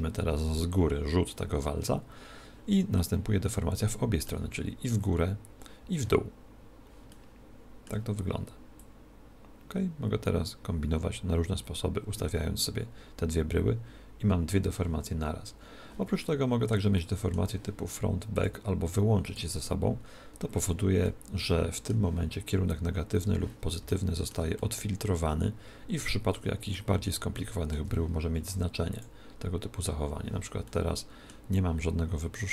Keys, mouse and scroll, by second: 3.0-4.8 middle drag, 7.1-9.0 middle drag, 9.0 click, 16.3-18.6 middle drag, 18.4 click, 21.1-23.0 middle drag, 23.9-26.5 middle drag, 27.2-29.0 middle drag, 29.0 click, 30.7-32.4 middle drag.